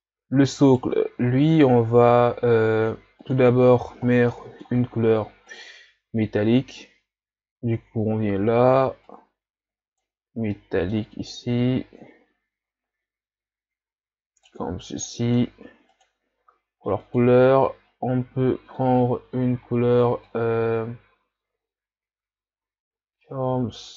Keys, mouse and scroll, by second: 0.7 right click, 1.3-1.7 shift+scroll down 3, 3.4-7.6 drag, 9.2-14.8 drag, 15.3-17.0 drag.